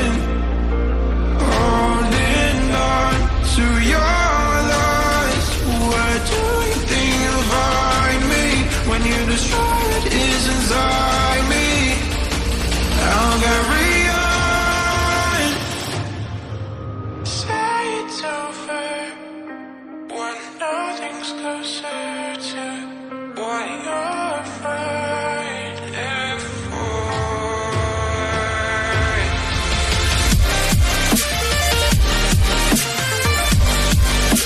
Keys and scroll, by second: 9.4 ], 9.4 [, 10.2 [, 11.3-12.9 typing, 15.6 [, 16.3 ], 17.6 ], 18.6 [, 19.3 [, 31.0 [.